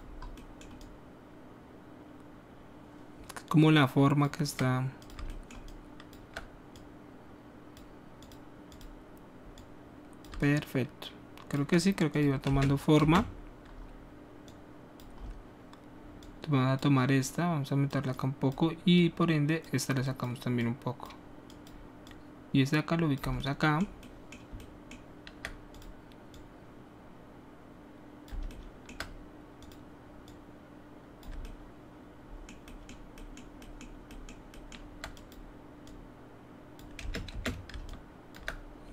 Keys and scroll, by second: 12.4 space, 13.0 space, 36.9 space, 37.3 space.